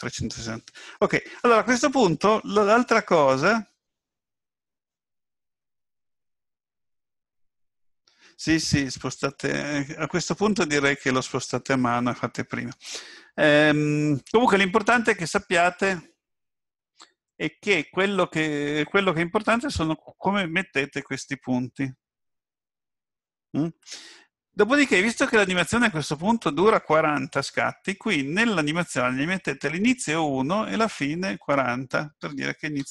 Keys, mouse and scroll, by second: 30.8 click.